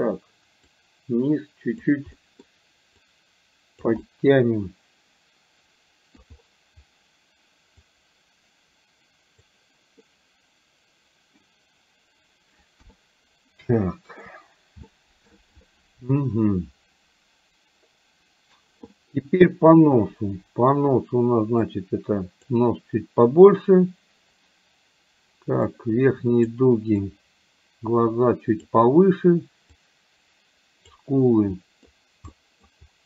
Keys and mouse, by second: 0.7-2.0 drag, 2.2 middle click, 3.1 click, 4.1-6.4 middle drag, 7.9-9.5 drag, 10.1-11.5 middle drag, 12.9 KP_1, 13.9 shift+middle click, 15.0 shift+middle click, 21.6 click, 25.7 click, 27.1-28.7 drag, 29.7-31.0 drag, 31.5 middle click, 32.4 middle click.